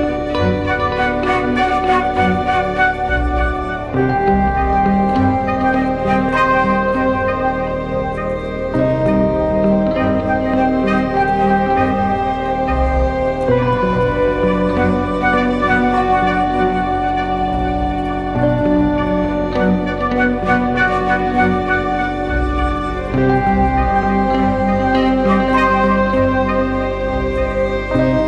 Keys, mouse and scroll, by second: 15.2-16.6 scroll up 1.